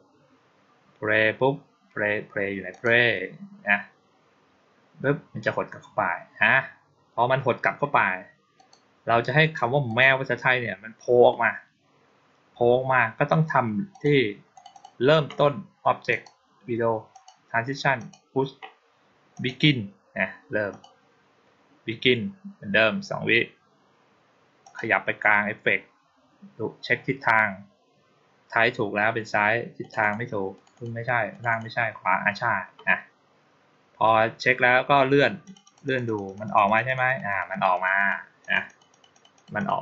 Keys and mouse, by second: 2.6 click, 8.4 click, 9.7 click, 13.8 click, 14.4 click, 14.6 click, 16.0 click, 17.0 click, 17.8 click, 19.2 click, 20.6 click, 24.5 click, 29.7 click, 29.9 click, 30.4 click, 30.6 click, 31.2 click, 31.4 click, 35.3 click, 35.5 click, 35.7 click, 35.9 click, 36.1 click, 36.3 click, 36.5 click, 36.7 click, 36.9 click, 37.2 click, 37.4 click, 37.6 click, 37.8 click, 38.3 click, 38.5 click, 38.8 click, 39.0 click, 39.2 click, 39.4 click, 39.6 click.